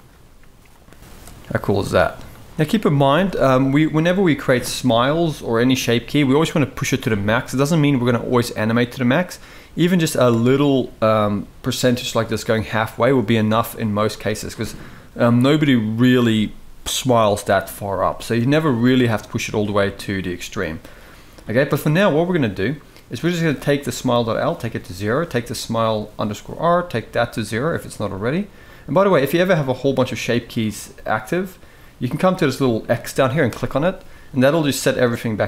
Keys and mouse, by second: 0.6-2.5 drag, 2.5 middle click, 2.8 shift+middle drag, 5.9-10.0 drag, 10.3-10.7 middle drag, 13.2 shift+middle click, 19.0-20.9 drag, 24.1 click, 25.3 click, 27.2-28.4 drag, 29.6-30.1 drag, 30.4 click, 31.1 click, 34.5 click.